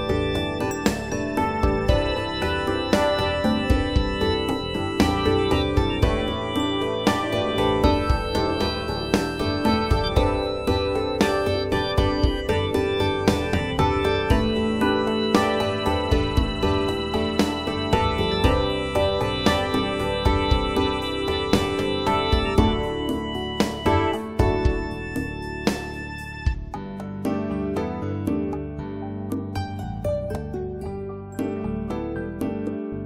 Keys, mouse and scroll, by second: 3.4 click, 3.7-4.5 scroll up 1, 5.9 click, 6.8-7.4 scroll up 1, 8.6 right click, 8.9 click, 12.2 click, 13.7 right click, 14.1 click, 15.4-15.8 scroll down 1, 15.8 scroll up 1, 17.3 click, 17.7 right click, 18.0 click, 20.5 right click, 20.8 click, 23.0 right click, 23.3 click, 25.2 right click, 25.4 click, 27.7 right click, 28.0 click, 29.8 right click, 30.0 click, 33.0 right click.